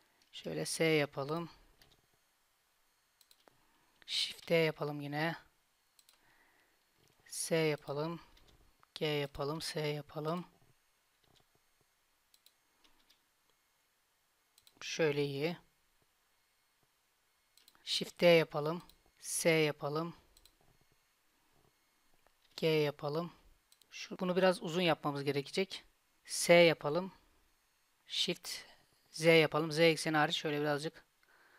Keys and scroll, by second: 0.4 s, 1.9 g, 4.4 shift+d, 7.1 s, 8.4 g, 9.6 s, 11.3 g, 13.1 s, 15.3 g, 18.1 shift+d, 19.1 s, 22.5 g, 26.4 s.